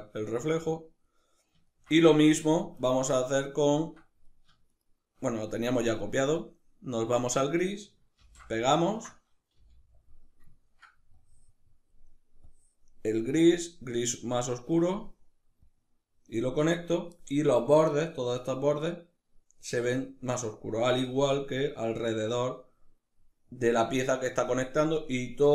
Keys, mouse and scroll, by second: 0.3-1.3 drag, 1.3-4.0 ctrl+middle drag, 4.4 shift+right click, 6.7 click, 7.8 ctrl+v, 8.3-9.8 ctrl+middle drag, 9.2 g, 9.8 click, 10.2-10.8 ctrl+middle drag, 10.8-11.6 drag, 12.1-12.8 drag, 13.0 drag, 15.3-20.7 drag, 20.7-25.5 middle drag.